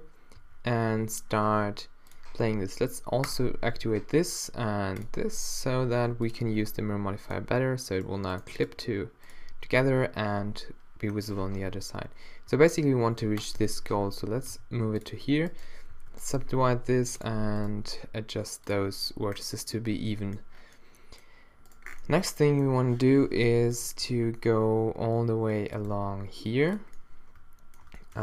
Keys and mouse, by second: 0.4 z, 1.0 z, 1.6 g, 3.9 click, 5.8 g, 6.5 e, 8.1 g, 8.7 g, 11.5 z, 12.6 e, 13.6 z, 14.6 g, 15.1 click, 16.0 alt+w, 16.4 g, 17.8 g, 19.5 middle click, 20.2 middle click, 20.3 middle click, 21.7-23.3 middle drag, 23.1 z, 24.1 e, 25.9 e, 27.3 middle click.